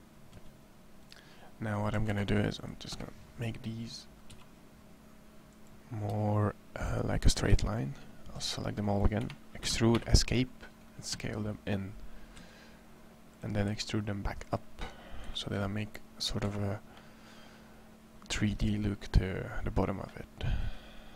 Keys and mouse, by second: 0.1 s, 1.7 a, 1.9 c, 2.8 click, 4.1 r, 5.9 g, 7.4 a, 7.4 c, 9.4 e, 12.2 s, 13.3 click, 13.5 e, 15.0 z, 16.2 Tab, 21.0 Tab.